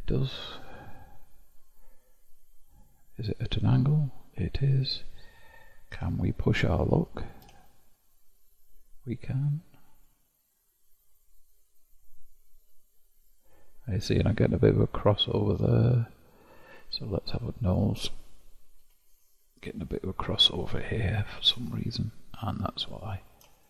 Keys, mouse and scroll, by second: 1.2-3.1 scroll up 4, 3.4 click, 6.0 q, 17.3-19.0 shift+middle drag, 19.0 Tab, 20.0-21.5 scroll up 4, 21.5 1, 23.0 click.